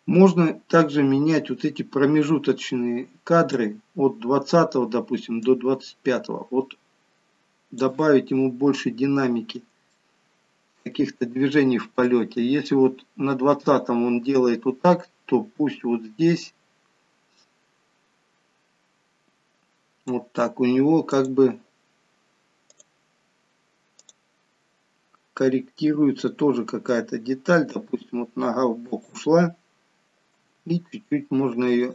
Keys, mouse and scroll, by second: 8.4-10.0 scroll up 2, 10.0 shift+middle click, 10.0-11.7 scroll up 1, 12.1 click, 21.1 click, 22.7 click, 25.4 middle click, 27.8 r, 30.5 g.